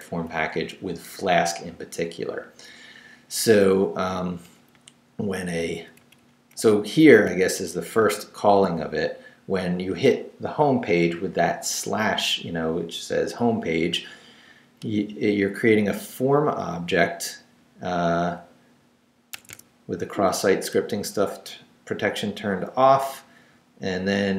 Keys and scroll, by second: 0.3 Right, 0.8 Down, 4.7 Down, 6.0 Down, 6.5 Up, 7.2 shift+Up, 8.0 shift+v, 17.6 Down, 18.2 Up, 19.8 Down, 20.3 Up, 20.7 Down, 21.1 Right, 23.0 Left, 23.5 Right.